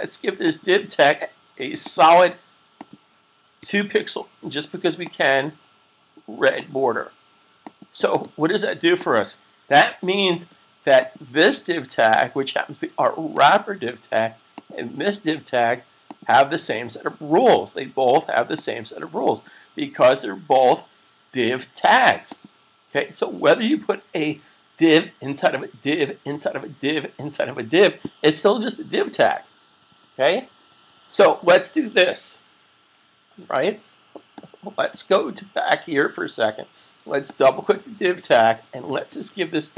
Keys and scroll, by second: 3.5 2, 9.5 super+s, 24.2 super+s.